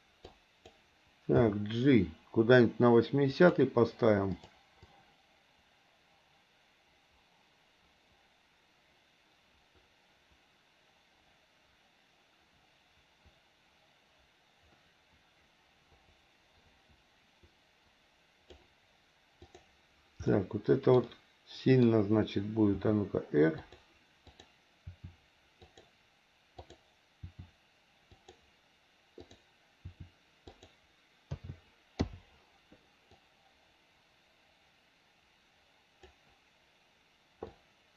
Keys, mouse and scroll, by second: 0.4 click, 1.3 g, 4.4 click, 4.8-18.6 drag, 19.4 click, 20.3 middle click, 21.0 middle click, 22.7 r, 24.3 click, 24.8 r, 26.6 click, 27.2 r, 29.2 click, 29.8 r, 31.3 a, 32.0 i, 33.2-36.1 drag, 37.6 click.